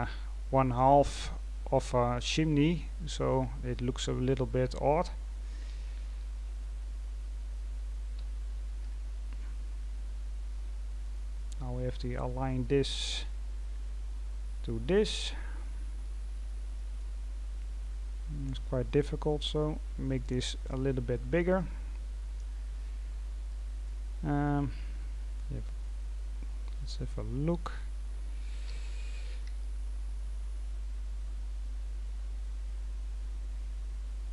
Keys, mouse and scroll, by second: 3.2-3.7 scroll down 4, 5.2-5.7 scroll down 3, 6.1-6.5 scroll down 3, 8.1 g, 11.5-12.2 scroll up 5, 12.2 scroll down 3, 12.5 middle click, 13.4-14.4 scroll up 4, 14.4-14.8 scroll down 1, 14.8-16.0 middle drag, 16.0-16.7 scroll down 3, 16.7 middle click, 17.2-17.8 scroll down 2, 17.8-19.2 scroll up 1, 19.2-34.3 drag.